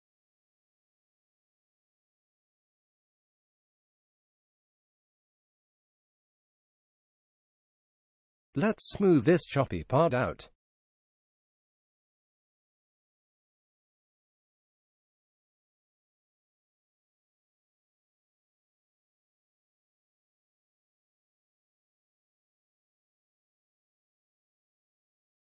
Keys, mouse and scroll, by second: 1.6-3.4 middle drag, 7.2-9.2 right drag, 9.4-11.3 right drag, 12.2 w, 21.7-23.5 right drag, 24.8-25.5 right drag.